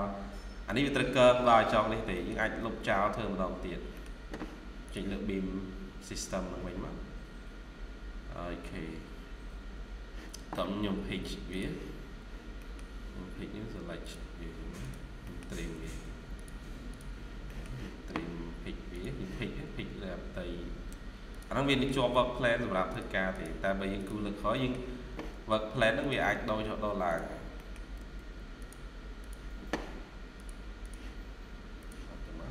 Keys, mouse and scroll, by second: 2.0 middle click, 2.3-3.4 typing, 2.9 scroll down 1, 3.4 scroll down 1, 3.8 middle click, 12.5 middle click, 15.1 middle click, 15.7 typing, 17.1 scroll down 1, 17.4 middle click, 19.3-19.7 scroll up 1, 21.6 middle click, 22.0 typing, 23.2 double click, 24.2 scroll down 1, 24.4 middle click, 27.4 middle click, 27.8 typing, 30.7 double click, 32.4 Escape.